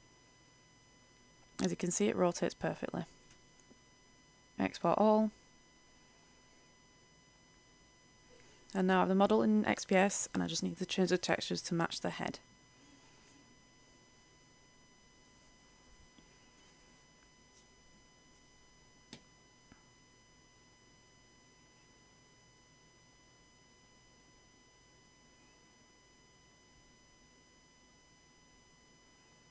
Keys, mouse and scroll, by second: 0.1 click, 0.6 ctrl+z, 1.7 click, 2.4 a, 2.6 a, 3.5-27.4 drag, 28.2 ctrl+shift+e.